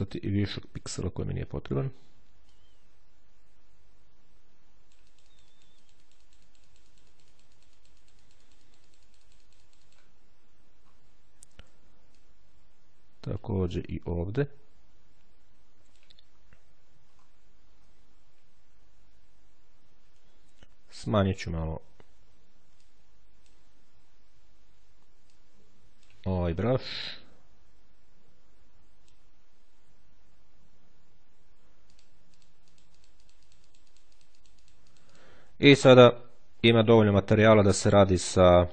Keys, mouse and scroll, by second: 0.6-2.2 drag, 2.4-10.3 drag, 10.4-11.5 shift+scroll down 1, 12.0-16.1 drag, 16.1-16.6 scroll down 1, 16.9-17.6 scroll up 2, 22.5-23.8 drag, 25.0-26.4 drag, 26.8-29.2 drag, 29.6 ctrl+z, 31.7-35.5 drag, 35.5-36.4 ctrl+scroll down 2.